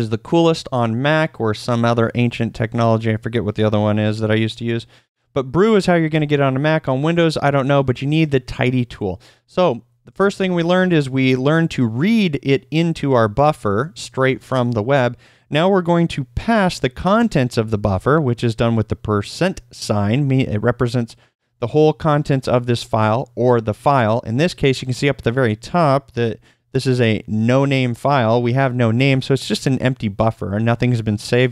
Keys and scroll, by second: 10.3 shift+;, 27.3 F1.